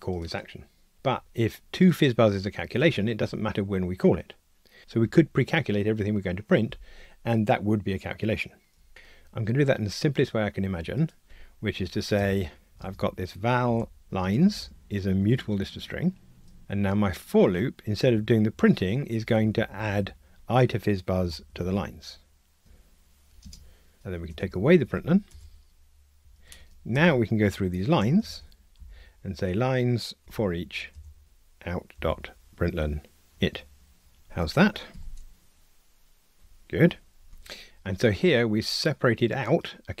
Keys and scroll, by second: 15.2 Tab, 24.3 super+BackSpace, 26.2 Escape, 31.2 super+z, 33.3 Tab, 34.9 ctrl+r, 36.7 Escape.